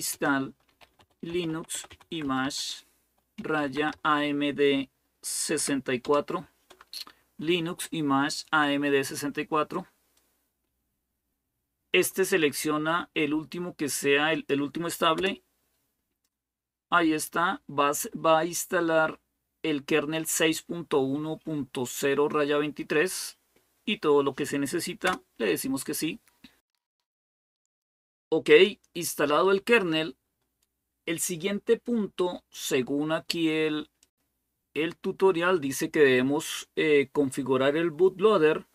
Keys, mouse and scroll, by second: 0.0-4.2 typing, 5.4-5.8 typing, 14.1 click, 15.0 Return, 24.8 Return, 26.4 click, 26.4-26.8 scroll down 1, 27.4 scroll up 1, 28.3-34.0 drag, 34.1 click.